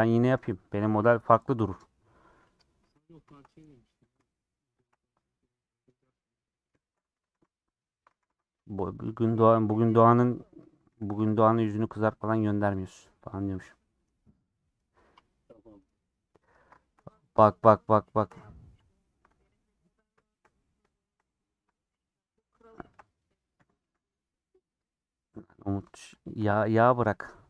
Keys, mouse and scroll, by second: 1.2 ;, 2.0 middle click, 3.0 click, 4.1 click, 4.8 shift+click, 5.1-7.0 middle drag, 7.0-7.3 scroll up 3, 7.2 2, 8.2 3, 9.2 2, 9.4 alt+click, 11.0 3, 11.4 alt+click, 13.3 alt+click, 16.4 alt+click, 16.8 shift+middle click, 16.9 scroll up 2, 17.4-18.8 shift+middle drag, 18.8 alt+click, 19.3 scroll down 3, 19.6 middle click, 19.9-21.5 scroll up 5, 20.2 shift+middle click, 20.9 shift+middle click, 21.5-22.6 middle drag, 22.6 alt+shift+click, 23.5 ;, 24.0 scroll down 2, 24.2 middle click, 24.8 scroll down 1, 25.0 middle click, 25.4 scroll up 1, 25.4 2, 26.7-27.1 scroll down 3, 27.1 middle click, 27.3 scroll up 2.